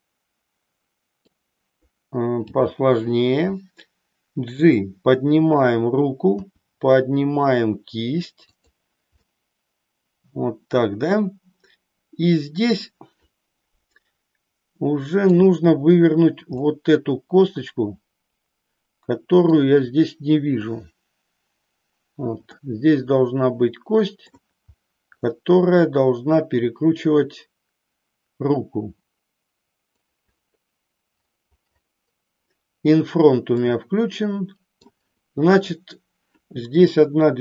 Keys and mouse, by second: 2.5 g, 6.5 r, 8.7 click, 9.2-15.5 middle drag, 16.7-19.5 middle drag, 22.6-24.5 middle drag, 25.3-30.1 middle drag, 33.6-34.9 middle drag, 35.5-36.6 drag, 36.7-37.4 middle drag.